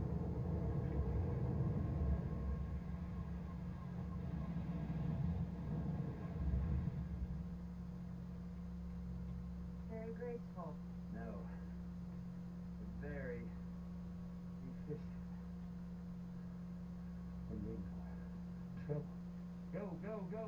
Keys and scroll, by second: 6.4 shift+Down, 9.2 Down.